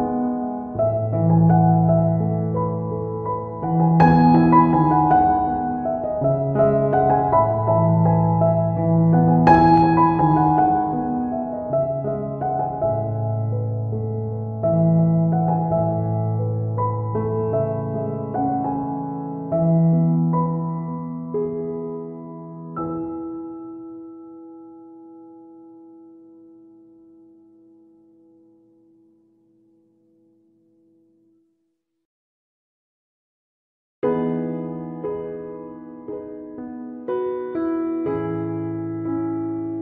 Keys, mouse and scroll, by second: 0.2 right click, 0.4 middle click, 0.7 click, 1.7 shift+middle click, 1.8 click, 2.1 middle click, 2.3 middle click, 2.7 right click, 2.9 click, 3.4 click, 3.9 ctrl+right click, 4.1 right click, 4.3 click, 5.6 click, 6.1 ctrl+right click, 6.2 right click, 6.4 click, 7.3 click, 8.3 click, 9.3 middle click, 9.7 ctrl+right click, 9.9 right click, 10.1 f, 10.2 click, 12.4 right click, 12.6 click, 13.1 click, 13.2 f, 13.3 click, 13.4 click, 13.6 click, 14.0 click, 14.1 right click, 14.3 click, 14.3 click, 14.6 f, 15.1 shift+click, 15.6 middle click, 15.8 middle click, 16.5 right click, 16.8 ctrl+right click, 17.3 ctrl+right click, 17.5 right click, 17.7 f, 17.8 click, 18.4 f, 18.6 click, 19.6 ctrl+z, 19.6 middle click, 20.0 right click, 20.2 click, 20.6 f, 20.7 click, 21.3 click, 22.1 ctrl+click, 23.0 middle click, 24.1 middle click, 24.6 shift+middle click, 24.7 ctrl+middle click, 25.1 right click, 25.3 ctrl+right click, 25.5 click, 26.1 right click, 26.3 shift+middle click, 26.6 middle click, 27.0 ctrl+right click, 27.1 shift+right click, 27.3 click, 28.5 ctrl+middle click, 29.2 middle click, 30.0 shift+middle click, 30.1 middle click, 30.3 ctrl+middle click, 30.6 shift+middle click, 30.8 ctrl+middle click, 31.0 f, 31.2 click, 32.2 click, 32.3 click, 33.6 shift+middle click, 34.0 click, 34.3 ctrl+middle click, 34.5 click, 35.4 click, 35.6-36.3 click, 36.0 click, 36.6 middle click, 37.0 ctrl+right click, 37.2 shift+right click, 37.4 click, 38.6 click, 39.1 click, 39.5 click.